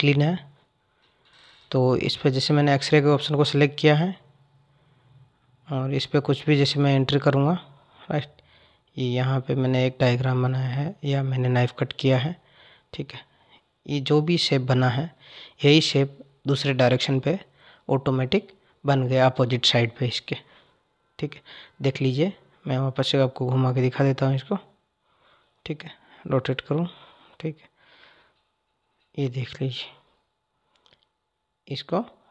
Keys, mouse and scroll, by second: 3.9 click, 6.3-9.3 drag, 22.3 click.